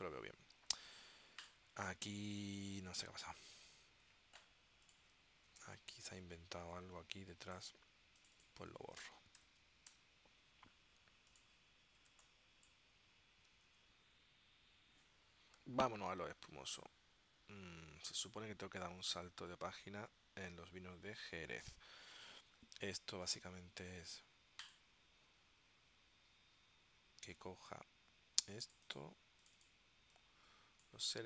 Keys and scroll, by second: 5.7 space, 9.5 Delete, 10.0 BackSpace, 12.3 space, 13.8 super+s.